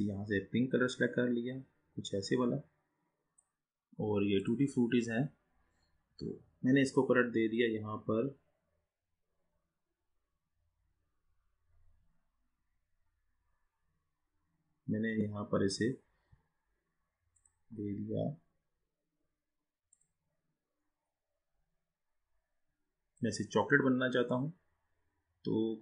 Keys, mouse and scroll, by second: 4.4 click, 11.1-12.0 scroll up 2, 12.0-14.1 scroll down 2, 17.4-23.0 drag.